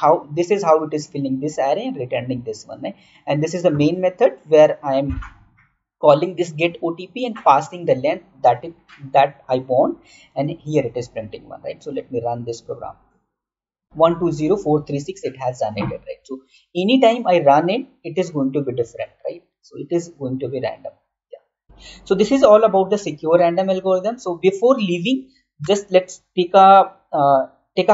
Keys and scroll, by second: 1.5 typing, 3.0-3.7 typing, 21.6 alt+Tab, 25.5 Right.